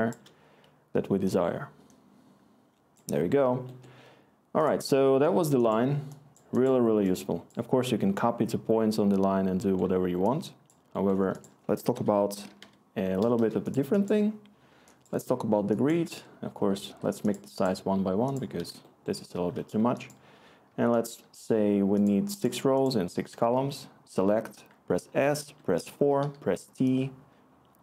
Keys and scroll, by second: 11.6 Tab, 11.7-13.1 typing, 13.3 Return, 15.9-16.6 typing, 16.0 Tab, 16.9 Tab, 20.3 6, 20.7-24.4 Tab, 21.2 6, 23.5 s, 25.4-26.7 typing.